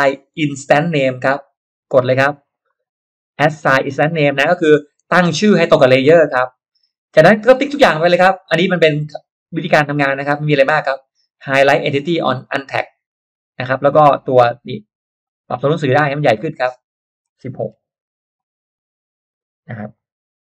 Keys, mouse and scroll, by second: 1.4 click, 3.2 click, 7.6 click, 8.3 click, 12.3 click, 13.3 click, 15.2 click, 16.3 click, 17.3 1, 17.7 6, 18.3 click, 19.9 click.